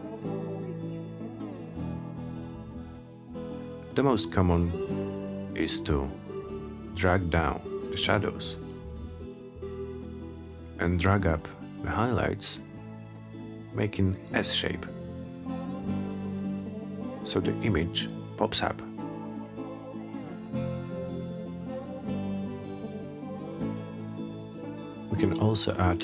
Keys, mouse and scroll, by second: 0.3 click, 3.5 click, 5.2-9.8 drag, 11.5 click, 13.7-19.7 drag, 25.3 click.